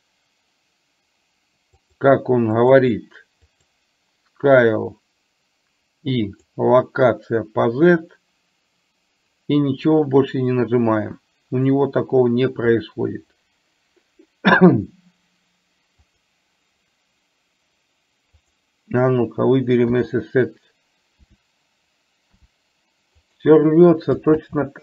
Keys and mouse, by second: 1.9 click, 6.3 click, 16.2 click, 18.4 click, 21.2 e, 24.4 ctrl+z.